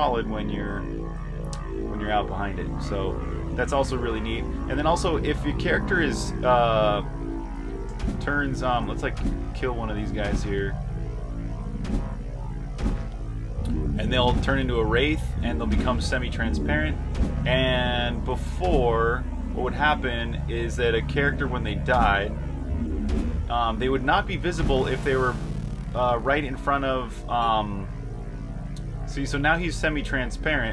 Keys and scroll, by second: 0.2 typing, 1.5 typing, 3.9-14.9 typing, 16.8-17.5 typing, 22.6-23.3 typing, 27.9 j, 28.4 r, 29.8-30.7 typing.